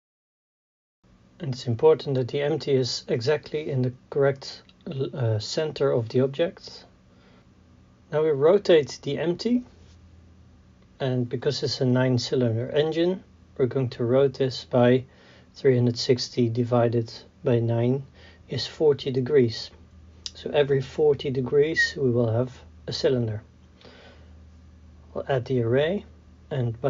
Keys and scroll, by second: 0.5 KP_3, 3.1 g, 4.0 y, 9.3 KP_1, 9.7 KP_3, 10.4 KP_1, 13.6 r, 16.7 r, 19.0 KP_0, 19.1 Return, 22.0 KP_4, 22.1 KP_0, 22.4 Return.